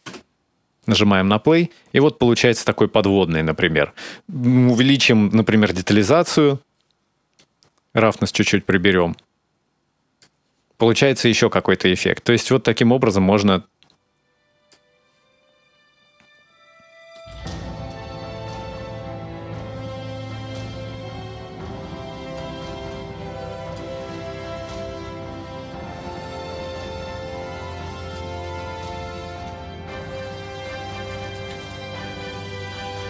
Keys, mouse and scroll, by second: 1.0-2.4 scroll up 1, 2.4-2.9 scroll down 1, 5.3 click, 7.1 click, 10.7 middle click, 11.6 click, 15.2-15.9 scroll up 2, 15.9-16.9 scroll down 2, 16.4-16.9 scroll up 1, 16.9 middle click, 16.9-17.5 scroll up 1, 17.7 click, 22.7 click, 23.9 click, 28.3-28.8 scroll down 2, 29.2 click, 31.0 click.